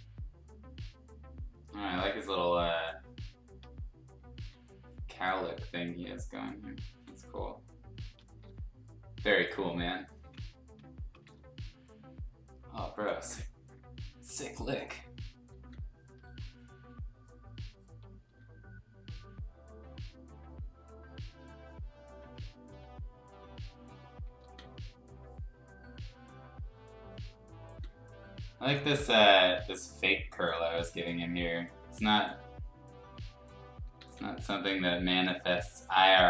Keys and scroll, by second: 1.8 ctrl+z, 4.3 ctrl+z, 6.9 ctrl+z, 8.4 ctrl+z, 10.2 ctrl+z, 11.2 ctrl+z, 15.5 ctrl+z, 16.2 ctrl+z, 18.2 ctrl+z, 22.2 z, 24.4 ctrl+z, 27.6 ctrl+z, 28.8 ctrl+z, 32.1 x, 33.9 ctrl+z, 36.0 x.